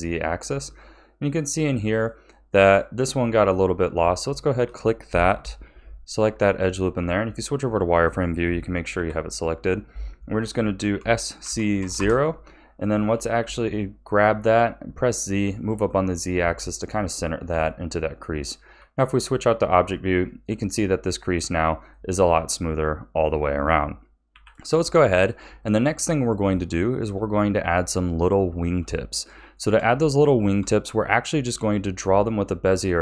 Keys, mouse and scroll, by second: 0.7-2.6 middle drag, 2.6 click, 4.2 alt+shift+click, 6.0 alt+shift+click, 7.0 z, 8.9 KP_1, 11.0 s, 13.0 g, 17.0 a, 17.5 Tab, 18.7 z, 19.6-20.8 scroll down 3, 20.8-24.3 middle drag, 24.3 KP_1, 24.8 scroll down 2, 25.4-33.0 shift+middle drag.